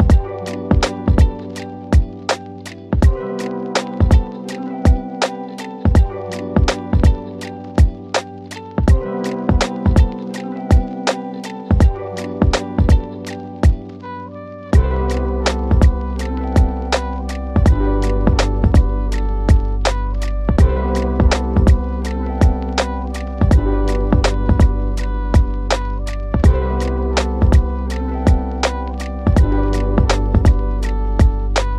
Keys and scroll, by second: 16.9 w, 18.7 d, 19.5 shift+Page_Down, 20.5 KP_Add, 25.1 f, 26.7 shift+F2, 27.1 Escape, 27.7 d, 29.2 KP_Add.